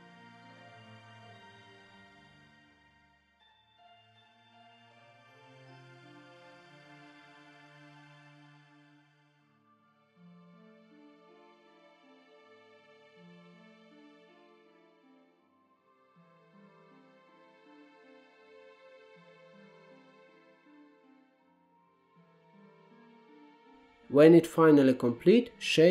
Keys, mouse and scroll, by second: 0.7 middle click, 1.2 3, 1.4 click, 1.6 x, 2.1 middle click, 2.7 click, 2.8 x, 3.2 middle click, 4.0 2, 4.1 click, 4.2 middle click, 4.7 ctrl+click, 5.0 scroll up 3, 5.2 shift+middle click, 5.7 ctrl+z, 6.0 scroll down 1, 6.1 shift+middle click, 6.4-6.7 scroll up 3, 6.7 ctrl+click, 6.9-7.3 scroll down 5, 7.3 shift+middle click, 7.8-8.2 scroll up 1, 8.2 shift+click, 8.3 shift+middle click, 9.0 ctrl+click, 9.1 scroll down 5, 9.3-10.3 middle drag, 10.3 ctrl+b, 12.3 scroll up 1, 12.5-13.5 middle drag, 14.4 ctrl+z, 14.8 ctrl+b, 17.4-18.9 middle drag, 19.4 click, 19.5 middle click, 19.8-20.1 f, 20.3 f, 20.5 middle click, 21.1 scroll up 3, 21.3 alt+z, 21.4 scroll down 2, 21.6 middle click, 22.4 click, 22.7 f, 23.2 f, 23.4 scroll down 1, 23.5 alt+z, 23.7 middle click, 24.1 Tab, 24.5-24.9 scroll down 2, 24.9 scroll up 5, 25.2 scroll down 1, 25.5-25.9 shift+middle drag.